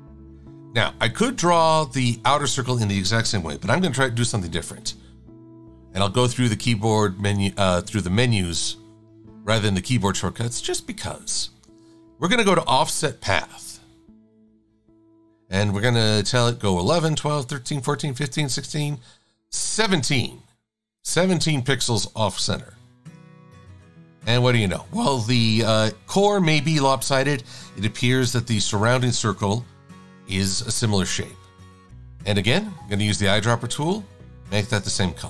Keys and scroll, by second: 18.0 Up, 28.3 super+-.